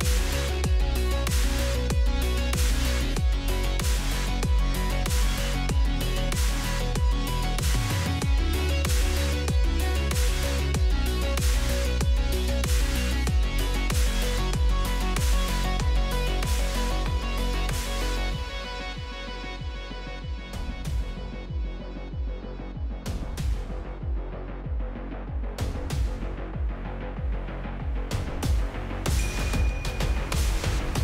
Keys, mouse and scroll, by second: 0.4 shift+a, 3.6 click, 3.9 shift+a, 6.1 click, 6.6 click, 7.4-8.0 drag, 8.9 click, 9.4-10.0 scroll up 2, 10.0 shift+middle drag, 10.7-13.5 shift+drag, 13.7 click, 15.2 click, 16.9 scroll down 1, 17.0-17.5 shift+middle drag, 17.5 shift+a, 20.8 click, 21.2 shift+d, 22.0 click, 22.5-23.4 drag, 24.0 click, 25.9-27.9 drag, 29.2 scroll down 1, 29.4-29.8 shift+middle drag, 29.9 shift+a.